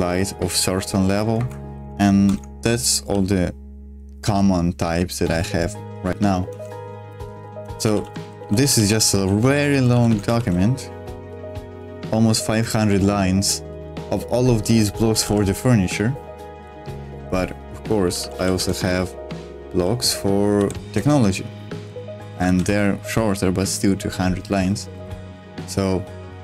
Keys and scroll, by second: 1.4 Escape, 2.2 ctrl+o, 3.0-4.7 typing, 6.6 ctrl+d, 7.1 ctrl+d, 7.6-8.0 ctrl+d, 8.4 ctrl+d, 8.6 ctrl+d, 9.0 ctrl+d, 9.1 ctrl+d, 9.4 ctrl+d, 9.7 ctrl+d, 9.9 ctrl+d, 10.1 ctrl+d, 10.4 shift+g, 13.1-15.8 typing, 16.8-20.6 typing, 18.6 Return, 21.0 Return, 22.5 shift+g, 25.0 g, 25.1 g.